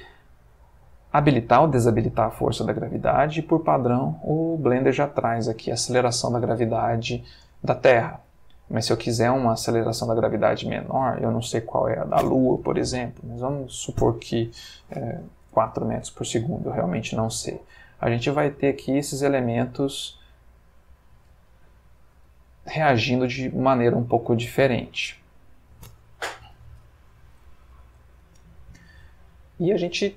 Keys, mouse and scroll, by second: 1.1 click, 1.6 click, 7.4 space, 9.1 Escape, 9.8 click, 10.3 click, 10.9 click, 15.2 4, 15.5 Return, 17.5 space, 24.2 Escape, 25.4 click, 26.4 -, 26.8 9, 27.5 ., 27.7 8, 27.8 Return, 29.2 ctrl+middle click.